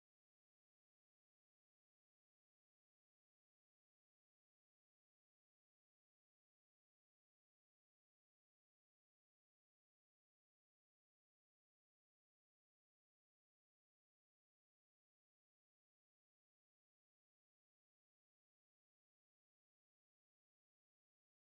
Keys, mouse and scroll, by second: 0.2 middle click, 1.1 s, 2.7 middle click, 2.9 middle click, 3.4 middle click, 4.2 ctrl+a, 5.9 Tab, 6.7 3, 7.1 a, 8.0 ctrl+b, 9.3 Tab, 10.2 right click, 10.3 right click, 12.6 click, 13.2 KP_1, 13.4 KP_7, 14.3 scroll down 3, 15.7 g.